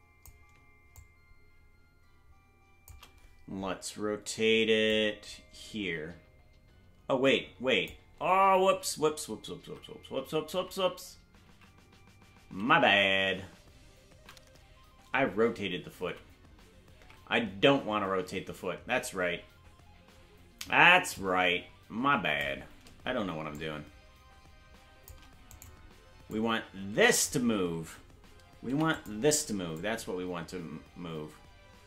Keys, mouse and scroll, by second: 1.4-2.9 shift+drag, 4.9-7.9 drag, 9.2 ctrl+z, 14.0 ctrl+z, 14.7 ctrl+z, 17.5 ctrl+z, 21.2-22.5 drag, 23.5-25.1 shift+drag, 25.6 right click, 26.3 click, 28.7 i, 29.8-31.8 drag.